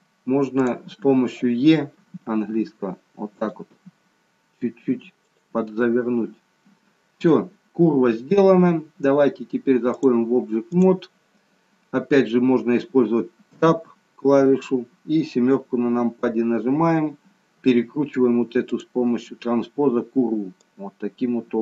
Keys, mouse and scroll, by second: 0.5 click, 1.9 e, 5.7 middle click, 5.7 e, 9.9 click, 13.4 KP_7, 15.3-16.3 scroll down 3, 16.3-17.4 scroll down 1, 19.3 click, 20.6 click.